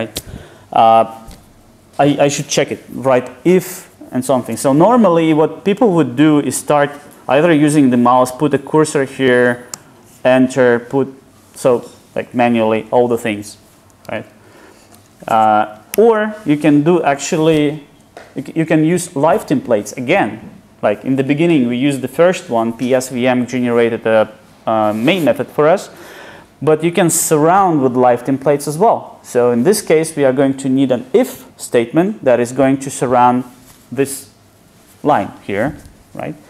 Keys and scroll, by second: 14.3 super+z.